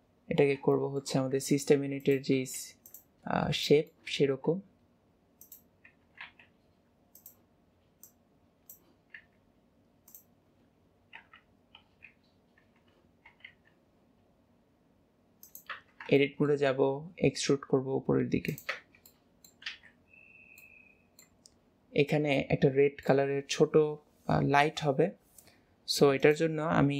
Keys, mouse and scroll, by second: 0.8 shift+middle click, 1.5 s, 3.7-4.3 middle drag, 5.9 scroll up 3, 8.1 click, 11.4 KP_1, 12.9-13.4 scroll down 2, 16.3 shift+middle click, 16.5 shift+middle click, 19.4 middle click, 20.4 scroll, 20.7-26.3 middle drag, 26.3 click.